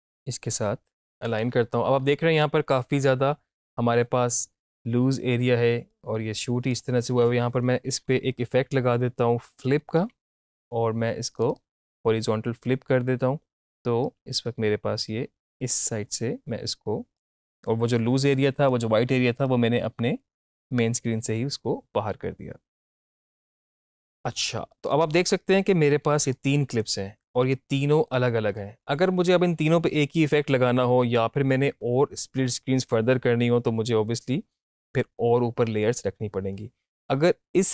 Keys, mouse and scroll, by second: 8.9 click, 9.5-10.6 typing, 11.3 click, 14.0-17.1 drag, 17.1-24.5 drag, 24.7-27.4 drag.